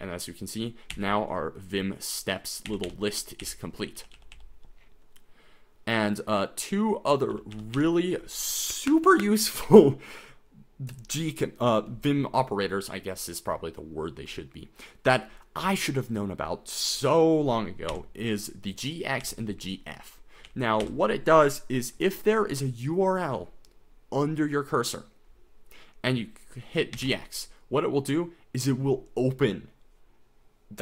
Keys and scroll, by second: 0.9 k, 2.7-4.3 typing, 7.3 j, 7.5 j, 7.7 j, 17.9 j, 20.5 j, 20.8 j, 27.0 g, 27.2 x.